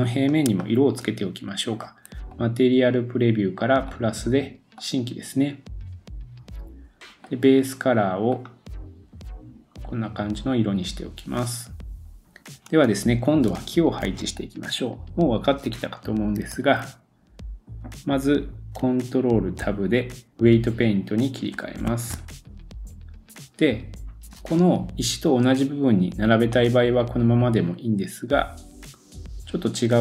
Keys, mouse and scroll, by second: 2.3 click, 2.4-3.8 middle drag, 2.9-7.3 drag, 7.3-13.5 middle drag, 9.4-12.2 drag, 12.2-13.1 scroll down 1, 13.1-13.5 scroll down 1, 14.0-16.4 middle drag, 16.5 super+s, 16.7-18.8 middle drag, 19.6 ctrl+Tab, 21.3 middle click, 22.1 ctrl+Tab, 26.0 scroll down 2, 26.5-28.9 middle drag.